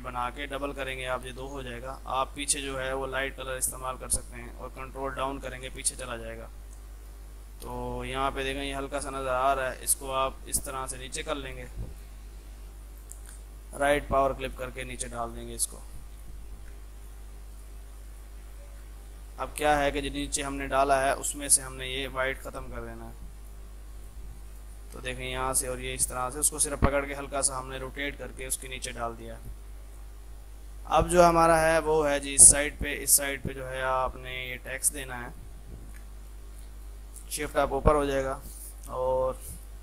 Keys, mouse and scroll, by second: 0.6-3.4 right drag, 4.9 ctrl+Page_Down, 6.5 F3, 6.7 F2, 6.7 click, 9.0 ctrl+z, 10.1-11.5 drag, 12.4 ctrl+z, 13.0 right click, 13.9 click, 15.9 F3, 16.2 click, 16.6 shift+F2, 17.0 ctrl+click, 18.7 ctrl+z, 20.2 click, 21.7 ctrl+z, 22.1 right click, 22.9-23.6 typing, 23.4 click, 26.9-27.6 typing, 27.1 click, 27.6 ctrl+z, 27.8 click, 28.2 F3, 29.0 click, 29.9 shift+F2, 30.6 F3, 31.1 click, 31.8 F2, 32.0-35.9 drag, 36.1 e, 36.3 click, 37.5 shift+Page_Up, 38.8 click.